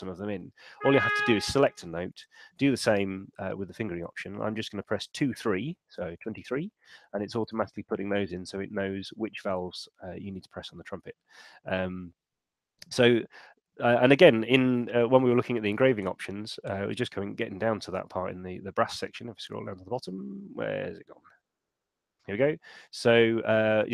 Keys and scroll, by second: 2.5 shift+f, 4.9-5.8 typing, 6.1 Return, 15.1 shift+super+e.